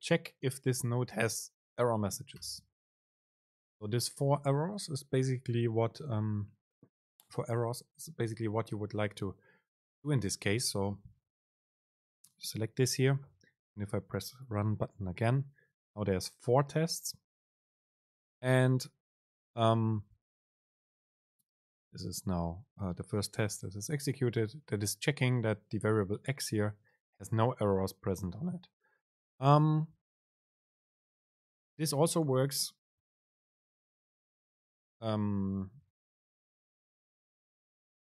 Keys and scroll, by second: 14.5 super+r, 34.2 BackSpace, 35.1 Escape, 35.8 super+Left, 37.1 BackSpace.